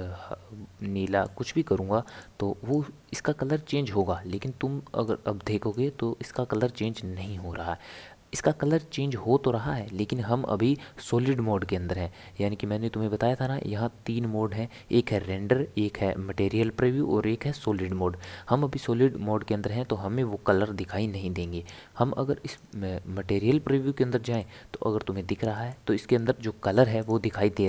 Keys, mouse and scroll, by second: 17.7 click, 22.7 click, 24.4-27.0 middle drag, 27.0 click.